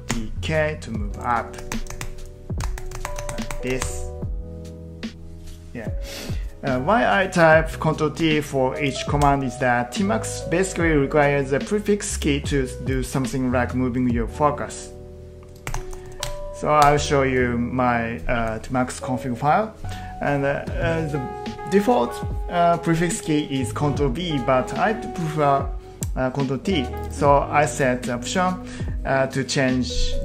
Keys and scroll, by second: 0.1 k, 1.6 ctrl+t, 1.9 ctrl+t, 2.6 ctrl+t, 3.2 ctrl+t, 8.2 ctrl+t, 9.2 Return, 15.4-16.5 typing, 16.8 Return.